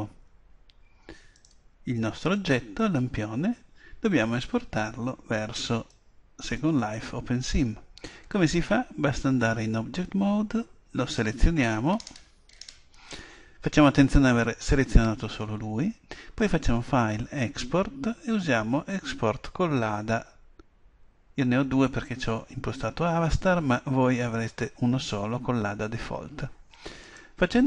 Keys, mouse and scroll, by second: 0.2 Escape, 0.2-1.9 right drag, 1.4-3.2 drag, 3.0-4.2 right drag, 5.9-7.8 drag, 11.3-13.0 right drag, 12.0-16.4 middle drag, 16.4-18.3 drag.